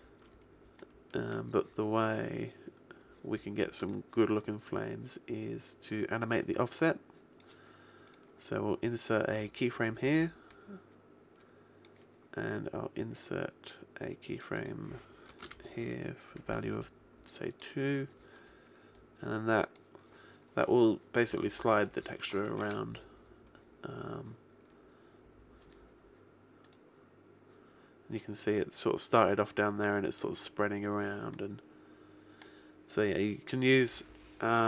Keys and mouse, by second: 3.8-6.4 right drag, 6.8 click, 8.0 middle click, 8.6 click, 8.6 right click, 10.0-11.6 middle drag, 11.6 click, 11.8 right click, 12.0-13.9 middle drag, 13.9-16.4 drag, 15.8-17.2 right drag, 18.9 click, 22.4 alt+a, 28.0 click, 32.8 middle click.